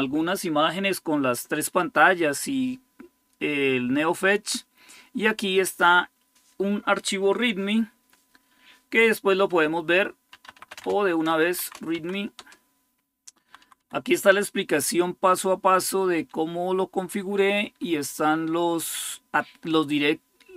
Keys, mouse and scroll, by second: 9.9-11.9 typing, 12.2 Return, 13.2 Down, 13.4 Down, 13.6 Down, 14.7 Page_Down, 15.1 Page_Down, 16.0 Page_Down, 17.3 Page_Up, 17.4-18.4 typing.